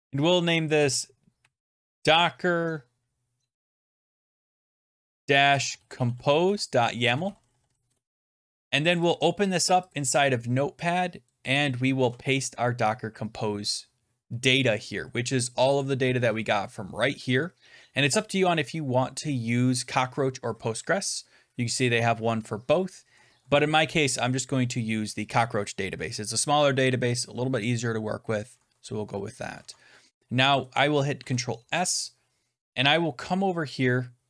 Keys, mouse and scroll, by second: 0.4-2.1 typing, 4.5-8.8 typing, 8.4 scroll, 8.9 click, 9.0 click, 9.8 click, 11.2 click, 11.5 click, 11.9 ctrl+v, 14.1 scroll, 14.3-14.6 scroll down 14, 15.4 scroll, 15.7 click, 16.2-17.9 scroll, 20.4-21.6 scroll, 21.8-23.3 scroll, 29.5 alt+Tab, 30.5 click, 31.1 ctrl+s, 33.2 click.